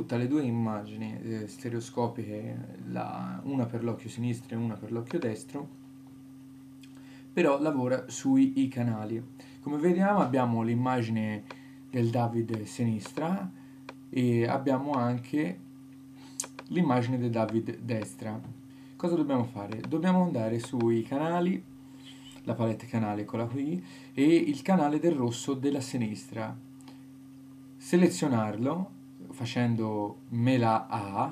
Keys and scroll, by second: 29.6 super+a.